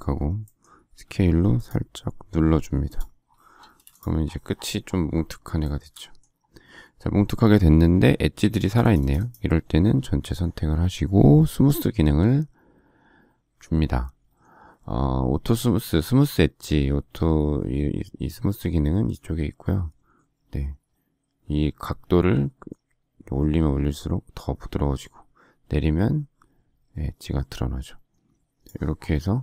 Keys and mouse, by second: 0.9 s, 3.6 space.